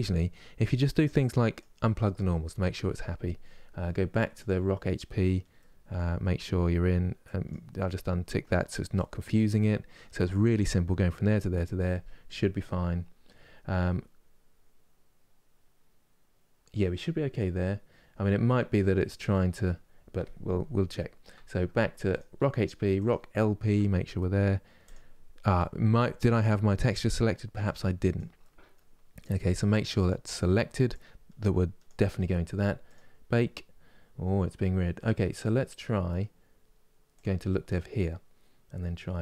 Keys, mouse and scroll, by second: 1.2 click, 4.1 click, 6.9-12.0 drag, 21.8 click, 24.5-33.1 drag, 37.0 click.